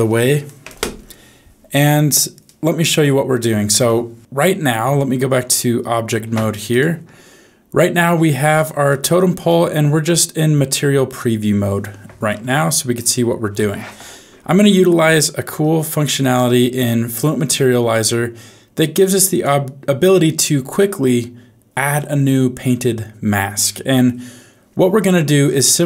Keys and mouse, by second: 7.0 ctrl+Tab, 8.5 click, 8.9 middle click, 10.0 z, 16.2 middle click, 17.9 click, 18.1-19.5 drag.